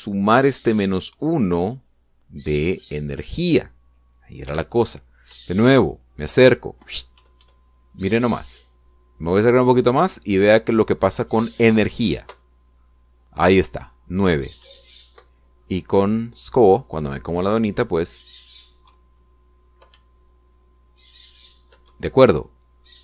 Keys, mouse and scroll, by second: 3.6 click, 5.2 p, 6.1 Up, 12.8 Up, 15.4 Up, 19.7 Down, 20.7 Up, 22.7 Down.